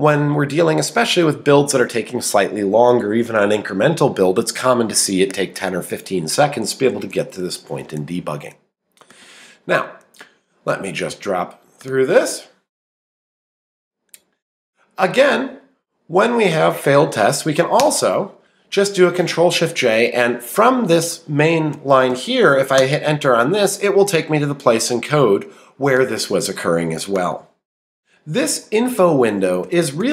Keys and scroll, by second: 17.3 Return, 20.7 Down, 21.4 Up, 21.7 Down, 22.1 Up, 22.5 Down, 22.8 Return, 28.0 Down, 28.5 Left.